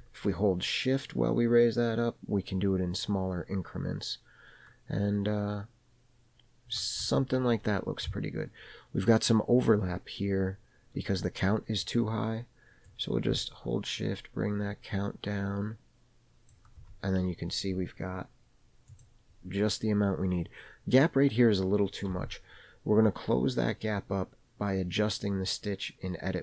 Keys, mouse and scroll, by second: 13.0-16.7 drag, 19.0 click, 23.9-26.4 middle drag.